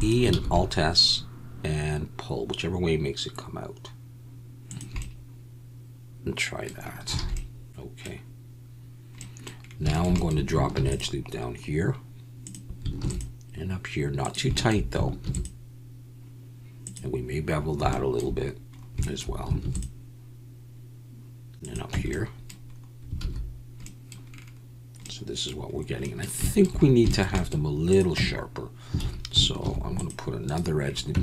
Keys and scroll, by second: 0.3 alt+s, 7.2 alt+a, 10.7 ctrl+r, 13.0 ctrl+r, 15.2 ctrl+r, 19.6 ctrl+r, 21.9 Tab, 23.2 alt+a, 28.1 Tab, 29.0 alt+a, 29.6 ctrl+r, 31.1 Tab.